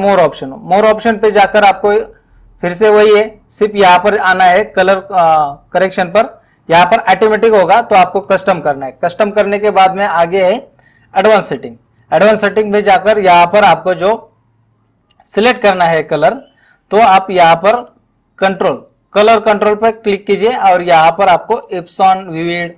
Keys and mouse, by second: 6.9 click, 8.3 click, 12.0 click, 17.8 click, 21.5 click.